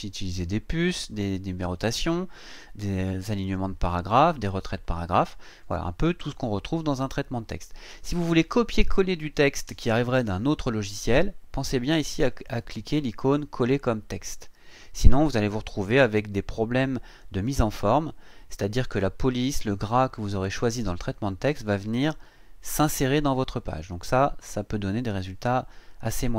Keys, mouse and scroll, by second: 13.5 click.